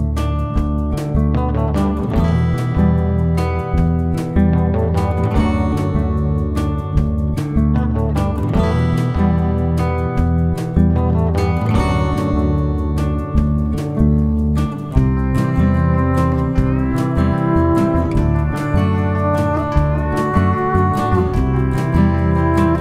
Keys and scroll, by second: 0.0 ctrl+*, 1.0 space, 2.7 shift+F6, 3.1 typing, 7.2 F1, 7.6 ctrl+d, 8.5 ctrl+*, 8.8-9.6 typing, 10.6 space, 11.9 F7, 13.2 F1, 14.1 space, 14.9 shift+F6, 20.8 F1, 20.9 Page_Down, 21.7 F7.